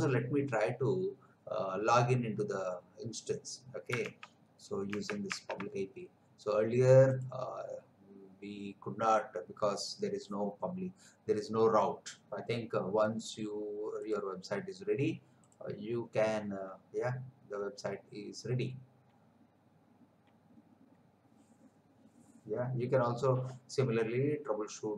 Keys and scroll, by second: 4.2 alt+Tab.